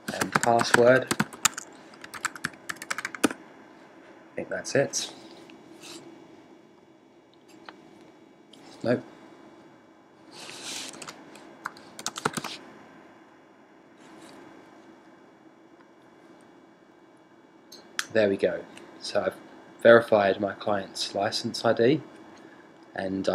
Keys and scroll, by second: 0.0-1.7 typing.